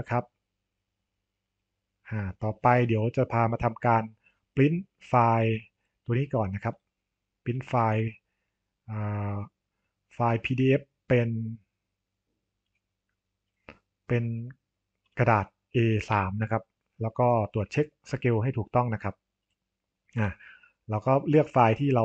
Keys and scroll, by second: 16.0 Delete, 20.1 Delete.